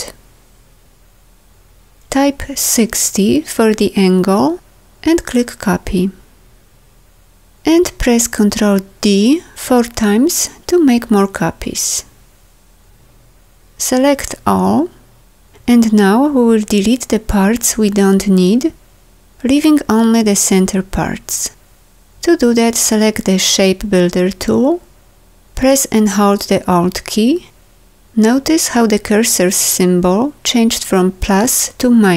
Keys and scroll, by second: 8.7 ctrl+d, 14.3 ctrl+a.